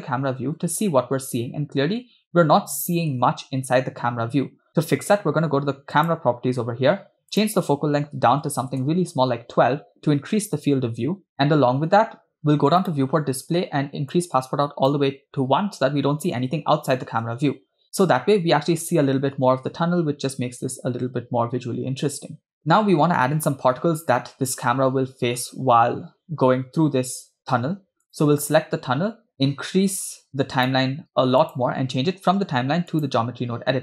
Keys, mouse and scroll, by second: 0.6 space, 3.1 space, 6.0 click, 7.4-8.8 drag, 12.9 click, 13.3 scroll down 2, 14.1 click, 17.3 space, 22.7 space, 28.1 drag, 29.4-30.7 drag, 31.4-33.1 drag.